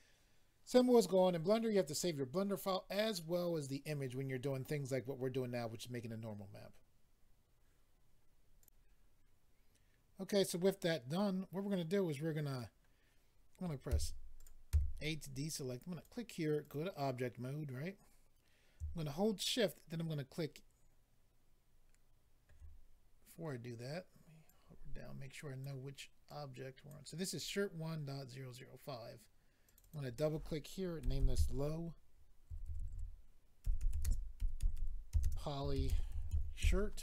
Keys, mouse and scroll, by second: 8.6 click, 14.3 click, 14.3-15.2 typing, 15.9 click, 16.6 click, 24.4 click, 26.3 click, 29.6 click, 29.7 click, 29.8 click, 29.9 double click, 31.0-36.3 typing, 36.6 Return.